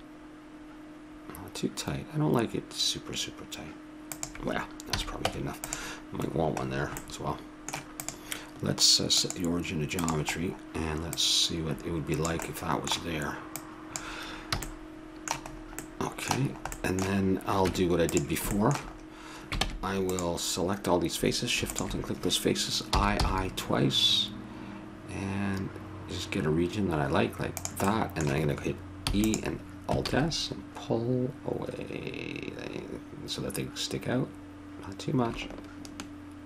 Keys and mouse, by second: 5.0 a, 5.3 Tab, 8.0-11.1 drag, 11.2-12.9 drag, 13.5-15.3 drag, 14.6 a, 15.3 middle click, 17.6 Tab, 18.7 middle click, 19.6 ctrl+Tab, 21.7-23.4 drag, 22.9 i, 27.9-30.0 middle drag, 29.0 e, 30.0 alt+s.